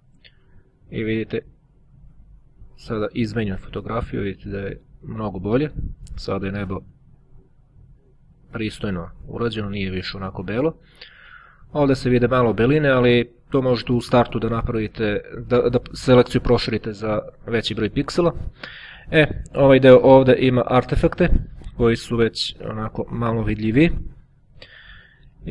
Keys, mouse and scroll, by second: 5.1 click, 7.8-8.3 ctrl+scroll up 2, 8.8-9.4 ctrl+scroll up 2, 9.4 ctrl+click, 12.8-13.3 ctrl+scroll up 2, 15.1-16.8 ctrl+scroll down 3, 17.3-18.3 drag, 18.3-18.9 ctrl+scroll up 1, 18.9-20.0 ctrl+scroll up 1, 22.0-22.6 scroll up 1, 22.6-23.2 scroll down 1, 25.0-25.5 ctrl+scroll down 1.